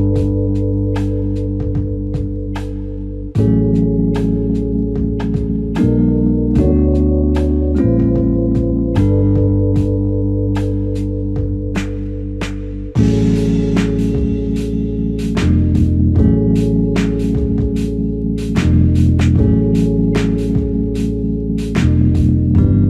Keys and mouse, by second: 3.5 q, 9.9 double click, 11.6-12.4 typing, 15.3 double click, 17.5 ctrl+click, 20.3 ctrl+click, 21.3 ctrl+click.